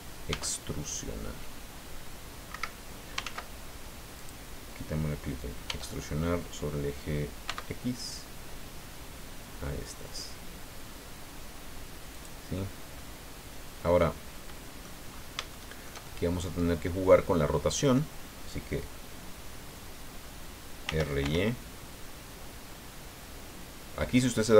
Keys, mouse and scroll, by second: 0.3 e, 2.5 Escape, 3.3 ctrl+z, 4.2 click, 5.7 e, 7.5 x, 12.2 click, 13.0-15.0 middle drag, 15.1-15.5 scroll up 3, 15.5 shift+middle click, 16.5-17.5 drag, 17.5 middle click, 20.8 r, 21.2 y, 24.2 click.